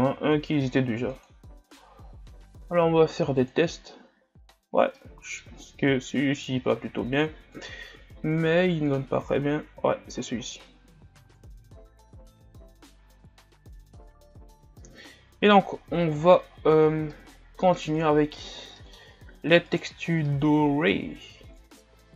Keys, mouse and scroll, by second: 5.2-5.6 middle drag, 5.6 scroll up 2, 9.1 click, 10.3 scroll down 3, 11.6 KP_Divide, 12.7 a, 13.1-13.9 scroll down 5, 13.9 shift+scroll up 5, 15.0-15.8 middle drag, 15.8-16.4 scroll up 4, 16.5-17.1 scroll down 6, 17.1-17.9 middle drag, 17.9-18.5 scroll up 6, 18.8 middle click, 19.0-19.7 scroll up 4, 19.8-20.3 right drag, 20.3-22.1 middle drag.